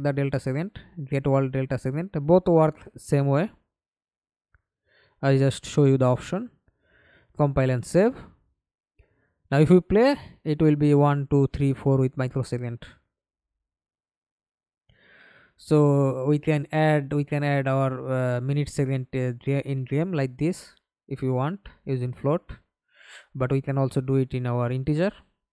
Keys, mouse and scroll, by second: 5.9 double click, 6.4 double click, 6.7 middle click, 7.5 F11, 7.9 alt+p, 20.1 Escape, 20.6 middle click, 21.5 F11, 22.5 scroll down 1, 24.2-25.5 scroll down 1.